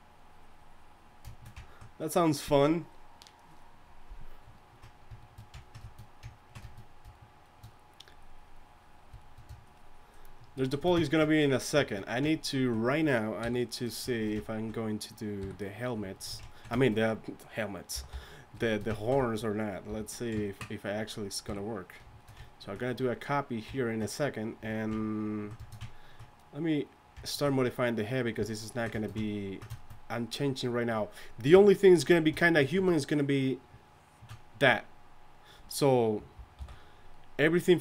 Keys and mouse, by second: 13.4 KP_1, 15.4 KP_3, 17.9 g, 18.1 d, 18.1 f, 19.9 f, 21.4 KP_3, 31.5 KP_3, 36.6 alt+m.